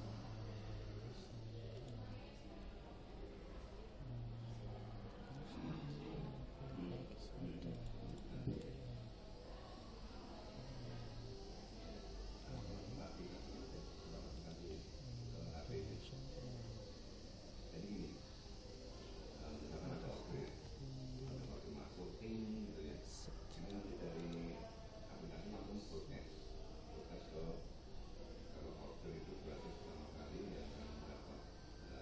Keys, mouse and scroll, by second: 1.7 click, 8.1 click, 14.3 right click, 20.5 middle click, 20.5 scroll up 1, 23.5-26.3 right drag, 28.7 s.